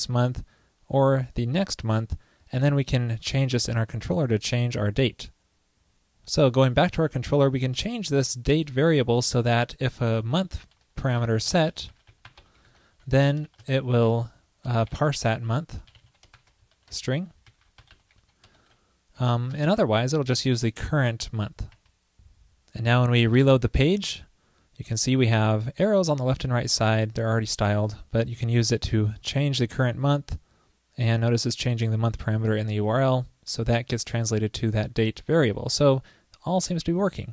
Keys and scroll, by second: 10.6 ctrl+d, 16.8 ctrl+p, 23.4 super+r.